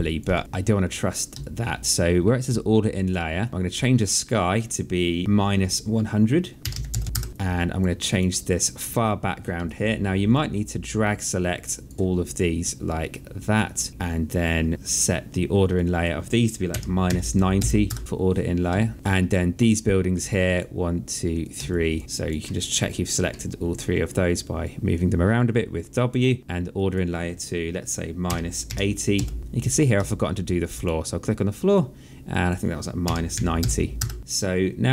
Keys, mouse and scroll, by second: 0.2 alt+click, 1.2 alt+click, 2.3 alt+click, 4.1 click, 5.2 KP_0, 6.2 click, 6.6 KP_Subtract, 6.7 KP_1, 7.0 Return, 7.0 KP_Enter, 7.3 alt+click, 9.4 alt+click, 12.2 click, 13.9 alt+click, 15.5 click, 16.5 KP_Subtract, 16.8 KP_9, 17.3 KP_0, 17.6 Return, 17.6 KP_Enter, 18.6 alt+click, 20.2 shift+click, 21.5 alt+click, 22.0 alt+middle click, 24.4 click, 26.5 click, 28.0 KP_Subtract, 28.4 KP_8, 28.9 KP_0, 29.4 Return, 29.4 KP_Enter, 29.9 alt+click, 32.1 click, 32.8 KP_Subtract, 33.1 KP_9, 33.4 KP_0, 33.7 Return, 34.2 click.